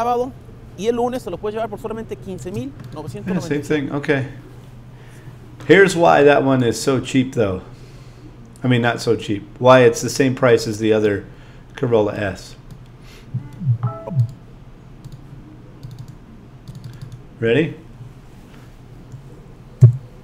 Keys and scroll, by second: 2.4 space, 19.8 5.